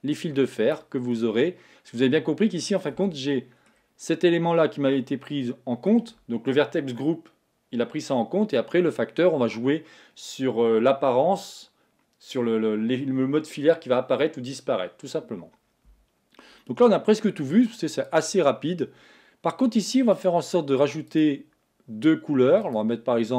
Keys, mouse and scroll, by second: 1.3-3.1 middle drag, 3.1 Tab, 3.4-8.3 middle drag, 18.3 click, 20.2 click, 21.2 click, 22.7 click.